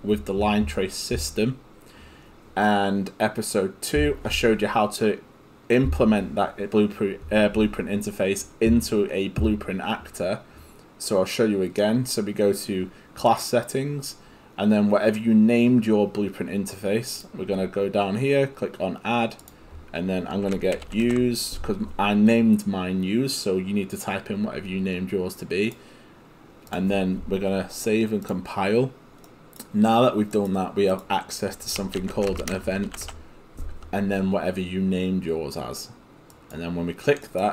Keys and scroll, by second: 20.5-21.6 typing, 31.8-33.6 typing.